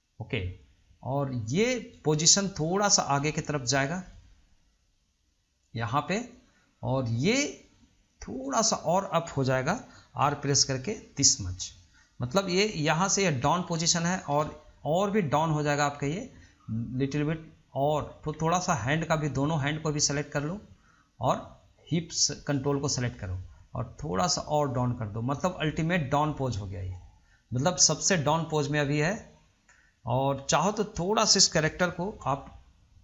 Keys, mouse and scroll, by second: 3.1 click, 4.7 click, 8.6 click, 10.4 r, 15.5 click, 16.9-18.1 drag, 19.2 click, 20.5 shift+click, 22.6 shift+click, 24.0 click, 27.9 scroll down 1, 30.5-30.8 scroll up 2, 31.2-32.3 scroll up 1, 32.3 drag.